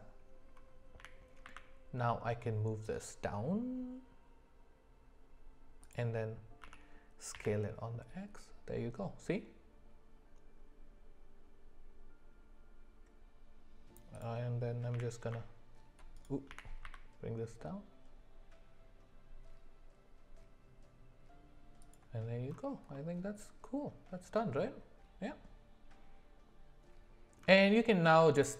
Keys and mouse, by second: 1.0 g, 6.6 s, 14.9 g, 16.5 g, 22.9-27.4 middle drag, 28.3 click.